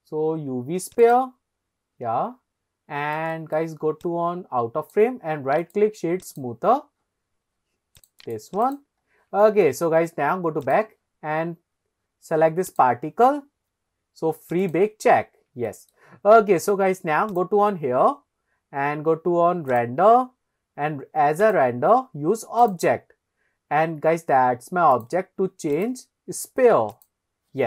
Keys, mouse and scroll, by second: 1.1 click, 1.6-2.0 scroll down 3, 2.2 scroll down 1, 3.4-3.7 shift+middle drag, 4.1 click, 5.6-6.0 right drag, 7.0 scroll up 1, 8.0 click, 8.2-8.8 right drag, 9.1-9.4 scroll down 2, 9.4 shift+middle click, 10.6 click, 12.6 click, 14.6 click, 15.2-15.5 scroll up 2, 15.7 shift+middle drag, 17.3 click, 18.0-18.3 scroll down 2, 19.7 click, 20.1-21.1 scroll down 1, 21.4-22.7 drag, 25.7-27.1 drag.